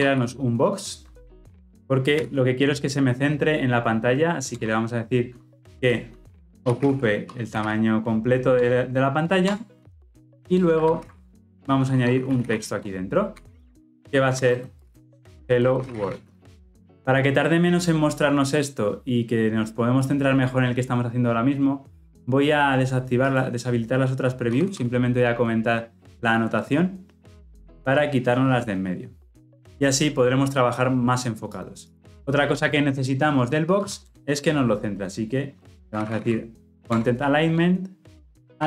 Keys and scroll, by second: 8.6 Return, 10.9 ctrl+alt+l, 10.9 ctrl+alt+o, 36.8 Return.